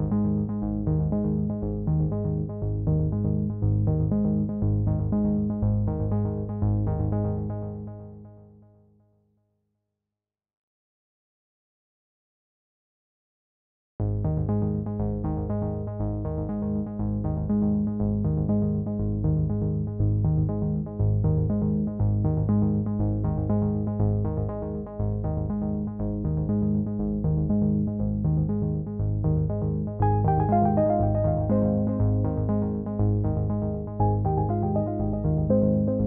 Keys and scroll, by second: 27.1 ctrl+j.